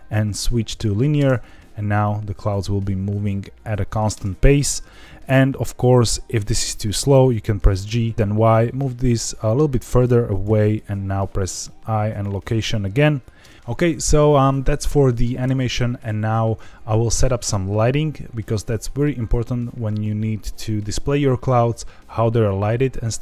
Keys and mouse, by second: 1.2 space, 4.1 space, 6.0 click, 7.6 g, 7.9 y, 8.1 Escape, 10.3 click, 10.7 i, 13.4 space, 14.3 middle click.